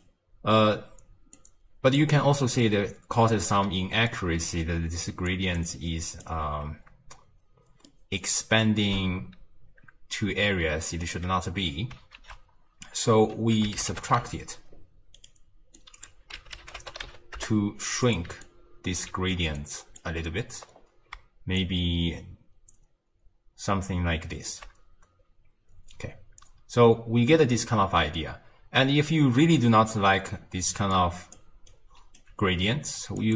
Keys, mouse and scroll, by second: 1.4 click, 2.6-5.1 middle drag, 5.1-6.3 typing, 5.3 click, 5.7-6.2 drag, 7.9-10.9 middle drag, 12.2 ctrl+a, 15.8 drag, 18.4 alt+click, 19.6 click, 20.7-21.6 scroll up 2, 21.6-24.7 shift+drag, 25.7-26.8 scroll down 3, 29.1-30.8 middle drag, 30.8 d, 30.9 click, 31.3 d, 32.2 d, 33.2-33.3 drag.